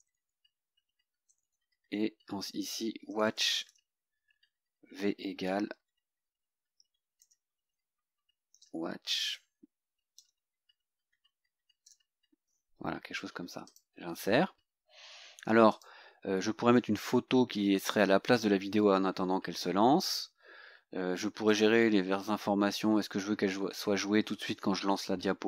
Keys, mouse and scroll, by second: 0.1 shift+Delete, 1.3 Right, 2.0 Left, 2.5-4.2 typing, 5.8 v, 7.3 BackSpace, 8.6 shift+,, 10.2 v, 11.9 =, 13.7 click, 15.8 click, 20.5 scroll down 2, 21.5 click, 22.2-22.6 scroll down 2.